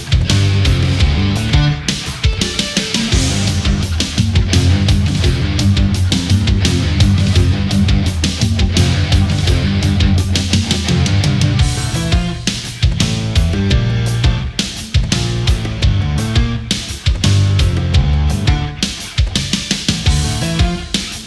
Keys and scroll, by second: 0.4 space, 2.5 space.